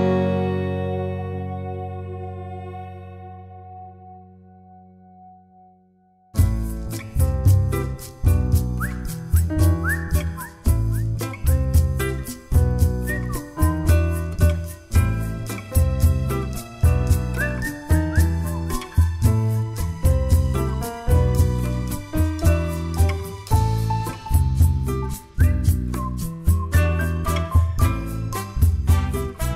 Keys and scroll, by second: 0.4 Delete, 12.1 b, 26.2 ctrl+a, 26.6-27.1 typing, 27.5 Return, 28.3 typing.